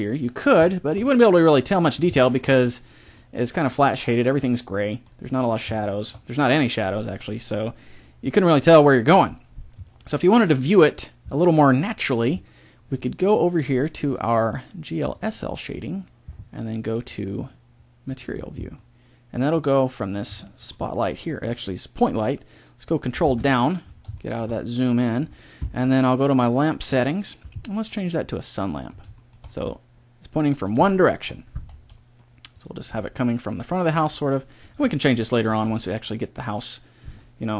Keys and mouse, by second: 4.6 middle click, 5.7-8.5 middle drag, 14.0-15.8 drag, 16.8-18.6 drag, 18.8 middle click, 19.9-21.7 middle drag, 23.2 ctrl+Down, 28.3 click, 29.1-30.4 middle drag, 31.7 r, 32.8 g, 33.9 r, 34.8-36.4 drag, 35.6 r.